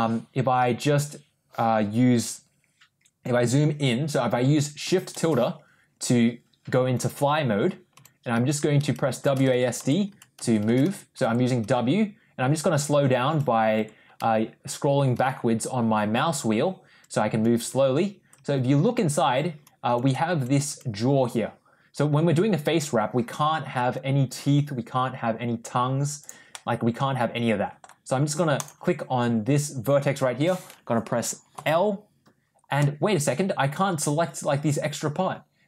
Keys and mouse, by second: 26.4-27.7 middle drag, 28.4 click, 31.4 l, 32.7-35.6 middle drag.